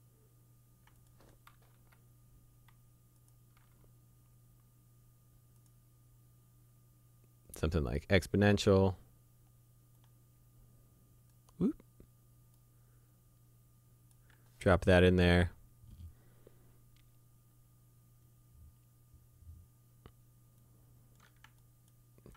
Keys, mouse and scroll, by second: 1.8 Delete, 3.2 click, 3.6 Delete, 5.6 click, 7.9 click, 10.0 click, 20.6 click.